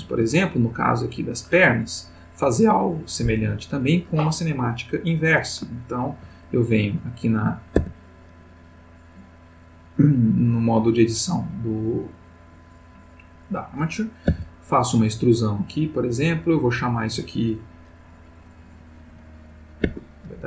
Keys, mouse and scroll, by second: 5.7-6.4 ctrl+middle drag, 7.0 click, 7.8 Tab, 8.8 click, 14.3 e, 15.8 click, 16.5 click, 18.7 click, 19.1 g, 19.8 Escape, 20.2 click.